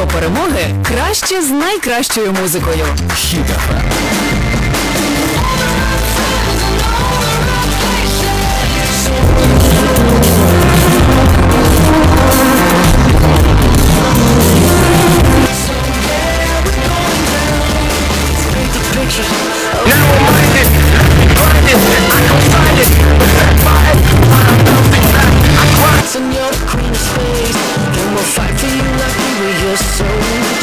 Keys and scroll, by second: 15.6 Page_Down, 26.0 Page_Down.